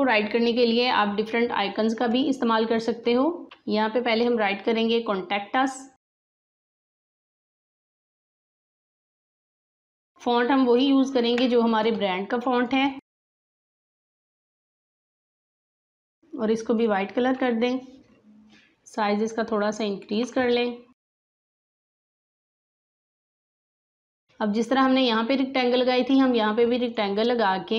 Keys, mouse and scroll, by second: 3.4 click, 5.9 click, 6.0-9.9 typing, 10.0-13.5 shift+drag, 13.2-14.4 typing, 14.6 Return, 16.7-23.0 drag, 23.0 alt+scroll up 1, 23.3 space, 23.5 click, 23.8 space, 26.8-27.7 drag.